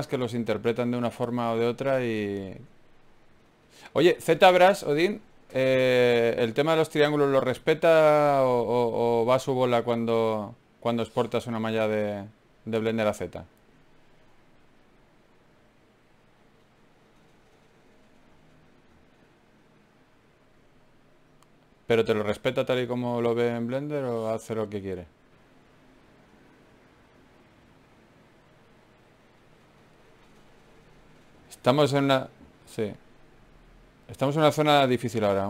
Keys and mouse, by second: 1.3 KP_Divide, 5.1 ctrl+Tab, 6.5 ctrl+Tab, 8.6 click, 10.1 e, 12.6 s, 14.6 g, 14.8-16.7 drag, 18.8 ctrl+r, 22.0 g, 24.8 ctrl+KP_1, 26.2 ctrl+Tab, 27.8 click, 28.5 click, 33.7 e, 34.7-35.4 drag.